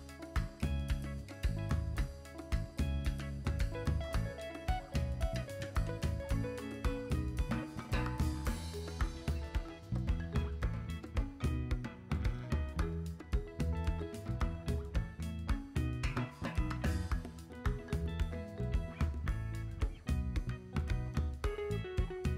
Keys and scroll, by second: 14.0 x, 14.8 v.